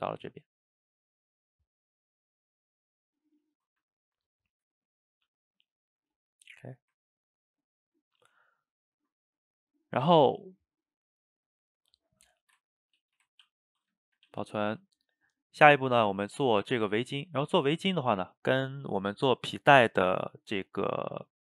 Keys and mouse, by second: 8.8-13.4 shift+middle drag, 13.4 ctrl+s, 14.1 shift+middle click, 14.3 a, 14.4 a.